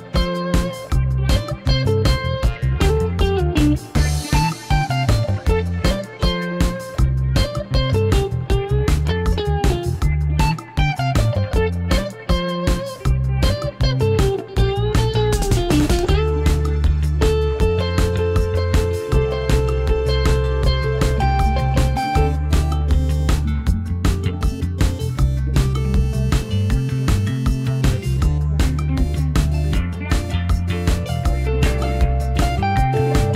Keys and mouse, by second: 0.8 x, 4.0-5.2 middle drag, 5.4 shift+middle drag, 5.7 middle click, 6.3 ctrl+s, 6.6 middle drag, 7.3 shift+d, 8.2 g, 8.3 z, 10.7-11.5 middle drag, 11.8 shift+d, 12.2 click, 12.5 g, 12.7 z, 16.0-17.3 middle drag, 17.3 middle click, 17.8-18.4 middle drag, 20.0 click, 22.5 click, 22.8 shift+middle click, 23.5 click, 24.0 ctrl+click, 26.1 shift+click, 26.9-29.1 drag, 29.4-29.8 middle drag, 31.0 ctrl+j, 31.7-32.9 drag.